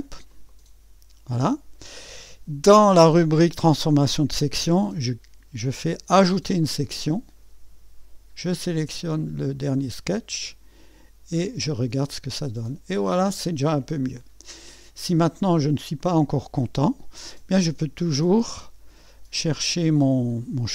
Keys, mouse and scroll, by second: 0.3 click, 0.5 click, 6.2 click, 9.7 click, 11.7 click, 14.2-16.7 drag, 17.6 click.